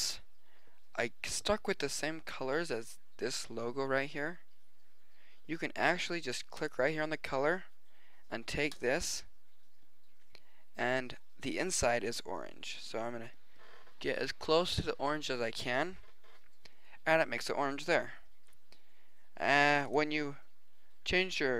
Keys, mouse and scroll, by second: 6.5-8.5 drag, 19.6 click, 21.0-21.5 drag.